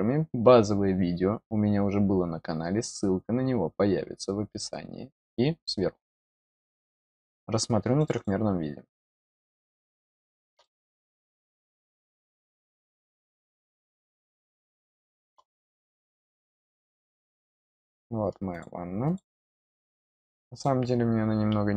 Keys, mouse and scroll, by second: 7.9 click, 8.1 click, 10.2-12.1 middle drag, 12.8 click, 13.5 scroll down 1, 14.4 middle click, 15.6-16.3 scroll up 1, 17.1-17.4 scroll down 2, 18.4 click, 19.0 click, 20.4 click.